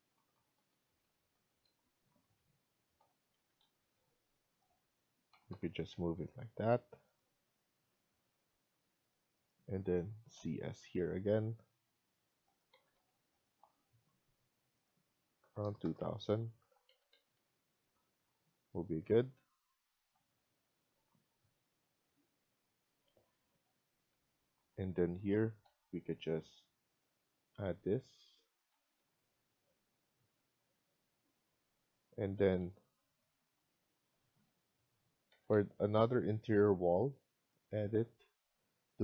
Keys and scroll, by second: 1.3 Up, 1.3 Right, 3.3 Up, 3.3 Escape, 3.5 Escape, 5.3 Left, 5.4 Left, 5.8 Escape, 6.1 Escape, 8.3 Escape, 10.1-10.5 typing, 12.6 Escape, 12.8 Escape, 15.1-15.8 typing, 16.6 Return, 16.7 Escape, 17.0 Escape, 17.3 Escape, 17.9 typing, 23.9 Escape, 25.4 typing, 28.6 Escape, 28.6 typing, 28.9 Escape, 32.3 Escape, 32.5 Escape, 34.7 c, 35.3 Escape, 35.4 Escape.